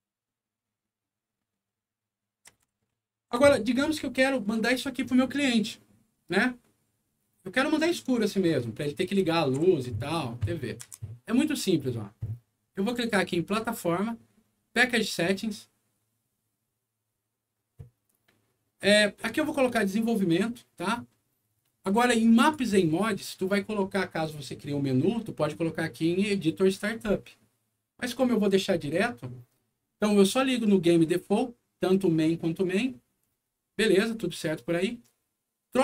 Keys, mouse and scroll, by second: 2.7 w, 9.1 a, 10.8 Escape, 13.0 click, 15.0 click, 22.3 click, 34.3 scroll down 2.